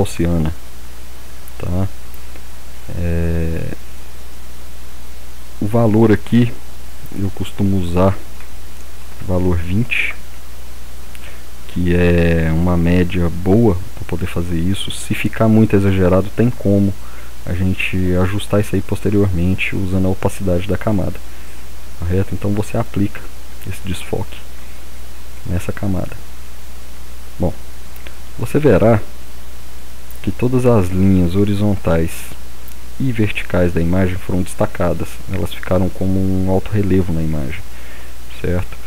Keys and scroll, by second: 8.8-9.7 typing.